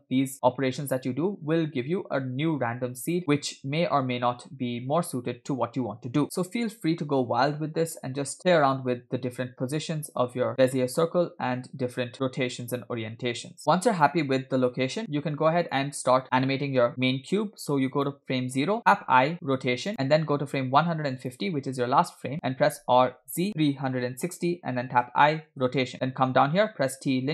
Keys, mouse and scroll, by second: 0.3 scroll down 1, 6.2-7.7 scroll up 2, 6.2 space, 9.7 space, 10.8 alt+r, 11.6 space, 15.1 space, 15.7-16.2 drag, 18.0 click, 18.9 i, 21.3 click, 22.7 r, 25.1 i, 27.2 t.